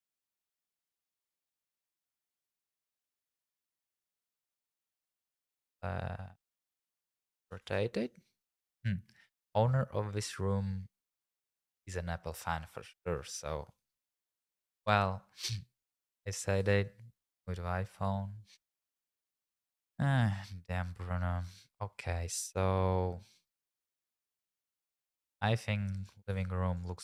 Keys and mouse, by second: 3.1 alt+r, 3.7 g, 3.9 shift+z, 4.3 click, 5.1 r, 5.2 z, 6.5 click, 6.8 g, 7.6 shift+z, 8.4 click, 14.1 r, 14.2 z, 14.8 click, 20.9 click, 24.7 middle click, 26.3 g, 26.3 x, 26.8 click.